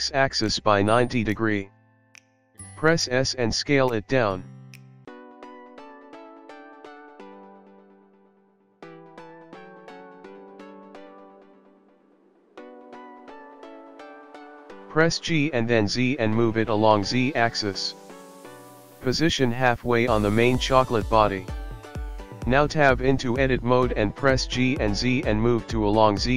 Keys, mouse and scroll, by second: 5.8 Tab, 7.2 scroll up 1, 8.2 click, 11.4 s, 15.9 scroll up 1, 16.8-17.5 scroll down 2, 17.5 g, 22.7 click, 23.1-23.5 scroll up 5, 23.7 click, 23.8 click, 24.6 shift+click, 24.8 shift+click, 25.0-25.6 scroll down 3, 25.7 g.